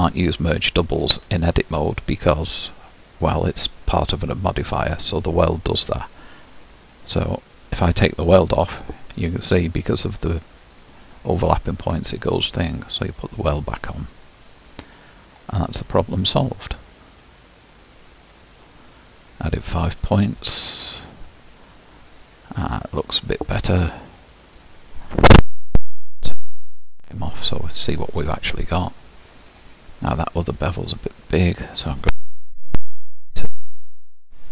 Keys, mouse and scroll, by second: 6.1-9.5 drag, 9.5-11.5 scroll up 2, 12.6-15.1 drag, 15.1-16.7 scroll up 4, 18.4-22.3 drag, 22.3-23.2 scroll down 1, 23.2 scroll down 6, 24.2 click, 27.3 alt+v, 27.9-28.7 scroll down 5, 28.7-29.1 scroll up 4, 29.4-30.3 scroll up 1, 34.1-34.5 drag.